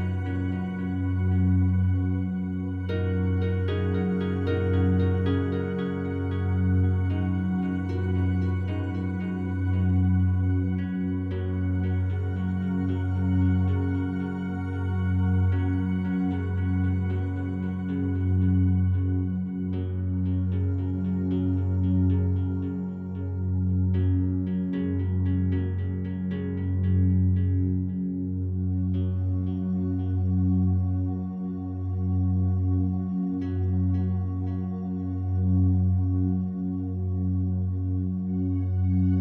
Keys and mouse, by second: 0.1 g, 0.2 g, 1.4 click, 1.8 alt+click, 2.8-4.1 alt+drag, 2.8 typing, 4.1 typing, 5.5-9.6 drag, 9.4 typing, 10.9 click, 11.3-14.2 alt+drag, 14.5 alt+shift+click, 14.9-16.1 alt+drag, 16.5 alt+click, 17.0 typing, 17.3 alt+click, 17.6 shift+click, 18.1 alt+click, 18.7-19.0 typing, 20.6 click, 21.8 alt+shift+click, 22.4 typing, 24.2-26.1 drag, 24.3 typing, 26.9-29.1 drag, 29.1 typing, 30.6 click, 32.0 click, 33.7 click, 34.4 click, 35.9-36.9 drag, 37.0-37.3 typing, 38.7-39.2 drag.